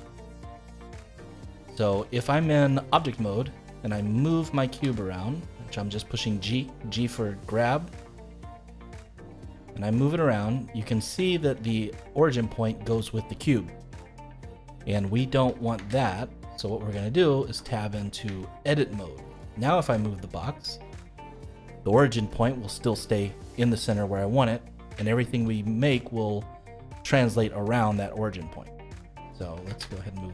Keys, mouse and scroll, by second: 1.2 Tab, 1.7-2.0 scroll down 2, 2.0-3.7 middle drag, 3.7 click, 4.7 g, 9.9-10.9 middle drag, 10.9-11.3 scroll up 3, 11.3-14.3 shift+middle drag, 15.7 ctrl+z, 16.6 middle click, 17.5 Tab, 18.0 scroll down 1, 18.3-19.8 shift+middle drag, 19.8 g, 23.4-24.8 middle drag, 24.8-25.1 scroll down 1, 25.1-28.1 shift+middle drag, 28.8 middle click, 29.6 ctrl+z, 30.2-30.3 middle drag.